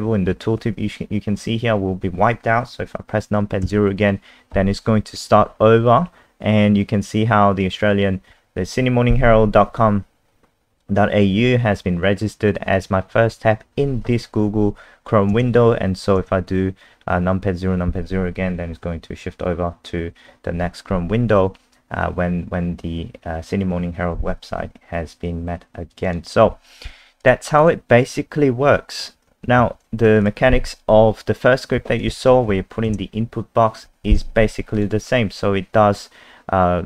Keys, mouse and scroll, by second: 3.6 KP_0, 25.9 click, 26.0 click, 27.2 click, 27.6 click, 29.6 ctrl+Page_Up, 30.2 click, 30.5-31.5 scroll up 3, 32.0 click, 32.5 F5, 32.9 KP_0, 34.7 click, 36.0 scroll down 1.